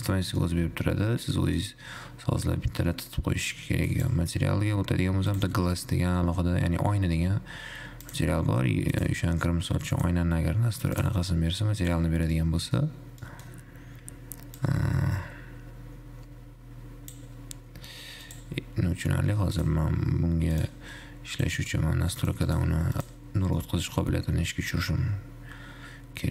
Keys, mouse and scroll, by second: 2.1-4.3 scroll up 2, 4.3 click, 5.5 click, 6.4-7.9 scroll up 2, 7.9-8.3 scroll up 1, 8.3 click, 9.4-12.9 drag, 12.9-14.9 middle drag, 14.9-17.9 drag, 18.5 click, 19.9 click, 20.4-20.9 scroll down 4, 20.9 click, 21.6 click, 22.4 click, 22.9 click, 23.9-26.3 middle drag.